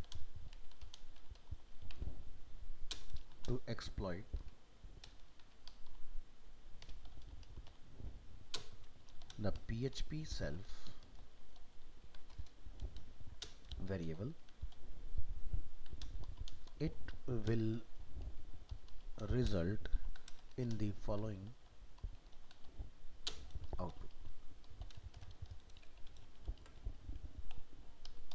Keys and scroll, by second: 26.6 ctrl+s.